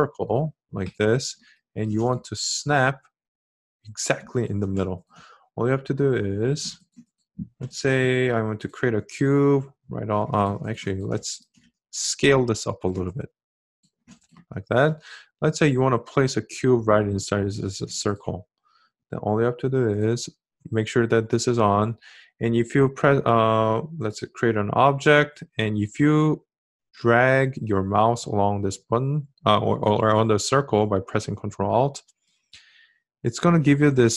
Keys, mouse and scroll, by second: 31.1-34.1 ctrl+alt+drag.